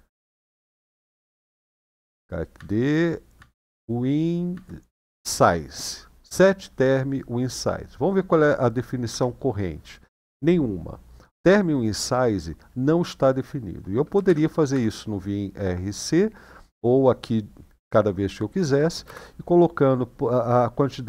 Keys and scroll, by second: 0.0 Tab, 1.1-1.9 typing, 2.3 Tab, 3.1 Tab, 4.3 Tab, 7.0 typing, 8.9 Return, 14.1-14.5 typing, 18.8 space.